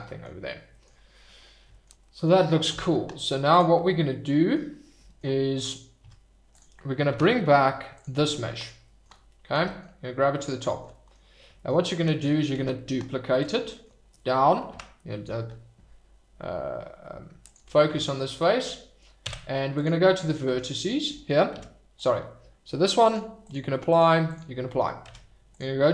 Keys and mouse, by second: 0.0 middle drag, 1.7 shift+right click, 2.0 middle drag, 2.7 Tab, 4.3 middle click, 6.0 Tab, 7.9 click, 9.5 g, 9.6 middle click, 10.4 click, 10.8 shift+middle click, 11.0 middle click, 11.0 click, 12.9 shift+d, 13.3 click, 13.7 shift+right drag, 14.7 KP_Divide, 19.2 Tab, 21.5 Tab, 23.2 click, 24.0 click, 25.0 Tab.